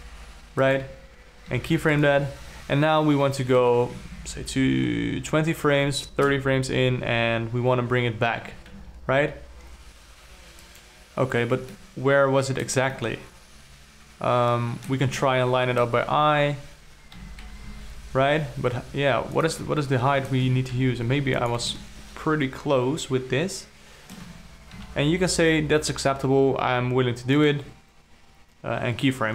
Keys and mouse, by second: 2.0 i, 4.4 shift+Up, 4.6 shift+Up, 6.3 shift+Up, 8.9 g, 12.2-13.2 ctrl+middle drag, 13.6-15.4 alt+middle drag, 15.8-16.4 ctrl+middle drag, 17.7 g, 20.2 alt+middle click, 21.0 g, 22.3-24.5 alt+middle drag, 24.5 alt+click, 25.7 i.